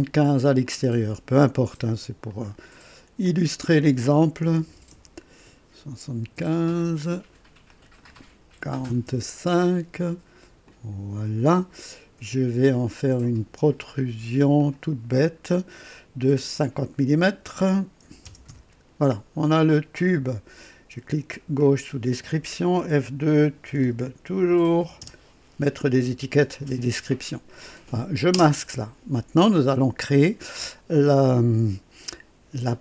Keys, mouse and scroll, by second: 0.6 click, 1.1 right click, 2.3 click, 3.3 click, 4.5 KP_7, 4.9 KP_5, 5.0 Return, 6.8 click, 7.7 click, 8.6 KP_4, 9.0 KP_5, 9.3 Return, 10.6 click, 12.8 click, 14.6 click, 18.0 KP_5, 18.4 KP_0, 18.6 Return, 21.6 click, 22.8-25.0 typing, 28.3 typing.